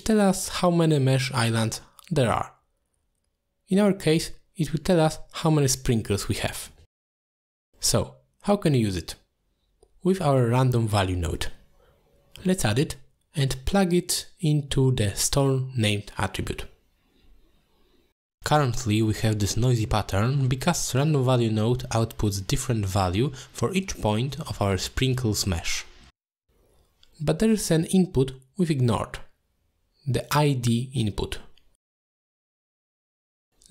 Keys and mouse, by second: 1.1 middle click, 5.4 click, 6.3 drag, 6.8 x, 8.5 shift+a, 13.3 click, 13.5-14.8 drag, 15.8 ctrl+shift+click, 16.1 middle click, 16.8 ctrl+shift+click, 18.6-19.0 middle drag, 19.4-19.8 shift+middle drag, 21.0-21.6 shift+middle drag, 22.1-22.5 middle drag.